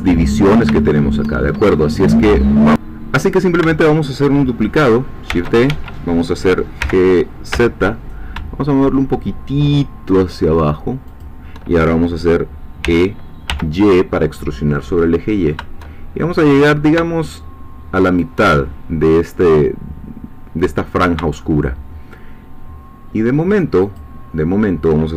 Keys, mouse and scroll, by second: 0.3-0.7 scroll up 2, 0.8 shift+middle click, 1.6-2.7 shift+scroll up 3, 3.2 scroll up 2, 5.3 shift+d, 5.7 shift+Escape, 6.8 g, 7.5 z, 11.1 shift+click, 12.8 e, 13.5 y, 18.0 shift+click, 21.4 shift+middle click, 22.1 shift+scroll up 1, 24.0 shift+click.